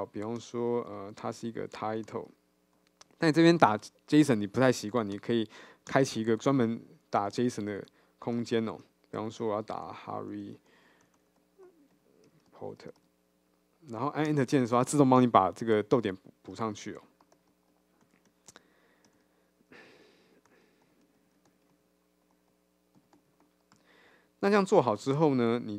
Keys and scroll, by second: 5.2 alt+Return.